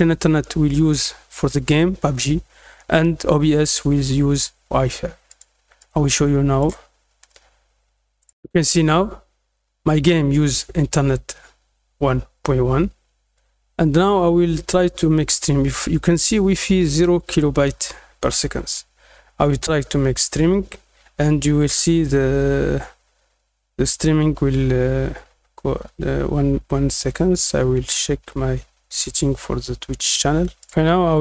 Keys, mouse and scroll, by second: 5.2 click, 5.7 click, 8.1 click, 15.2 click, 30.5 click.